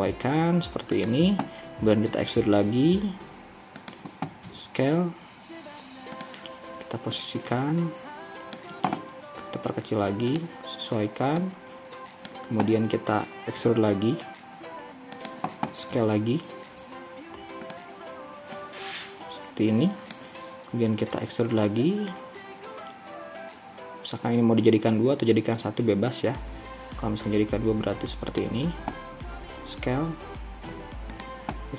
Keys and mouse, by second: 2.2 e, 4.5 s, 7.6-9.5 drag, 9.5 s, 13.7 e, 16.0 s, 19.0-21.2 drag, 21.2 e, 29.3 s.